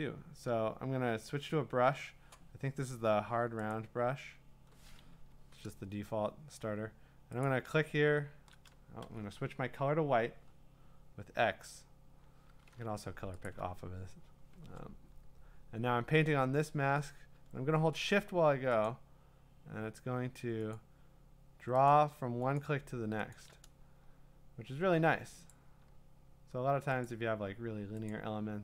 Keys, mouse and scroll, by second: 3.8 right click, 5.1 Escape, 7.4 click, 9.0 x, 11.5 click, 13.5-15.5 alt+drag, 18.1 click, 18.9 shift+click, 20.7 click, 21.9 click, 22.6 shift+click, 23.3 shift+click, 27.1 shift+click, 28.1 shift+click.